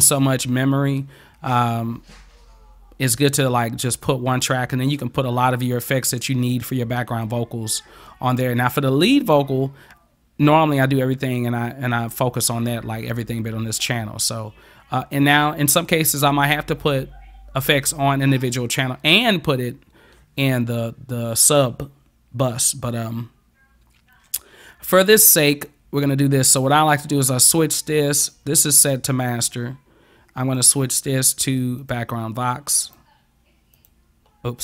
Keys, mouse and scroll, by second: 30.5 click, 31.8 click, 32.9 click, 33.8 click.